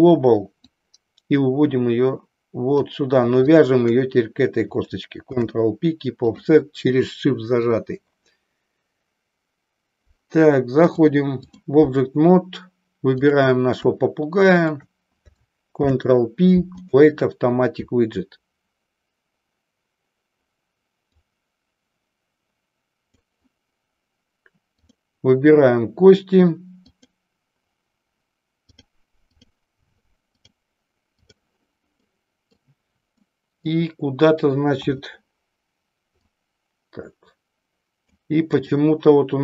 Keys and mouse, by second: 0.7-2.8 drag, 3.4 shift+click, 10.8 click, 13.3 click, 14.4 shift+click, 21.2-23.2 drag, 24.8 click, 28.7 click, 30.2-31.4 drag, 32.1 middle click, 33.2-33.8 middle drag, 36.3 click, 38.4 click.